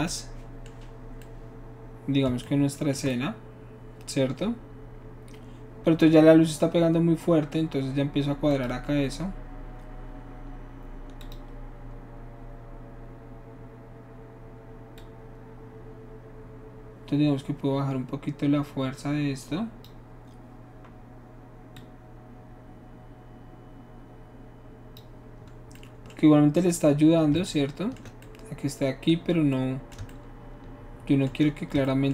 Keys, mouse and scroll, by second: 8.5 click, 11.2 click, 15.0-19.9 drag, 21.8-25.0 drag.